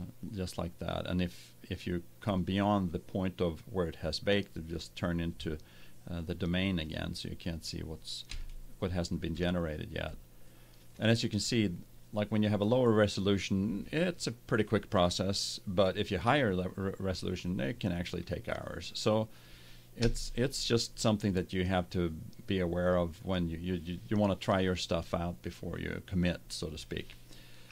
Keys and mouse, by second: 2.3-4.0 drag, 4.1 middle click, 6.8-8.6 drag, 9.1-12.1 middle drag, 19.9 KP_0.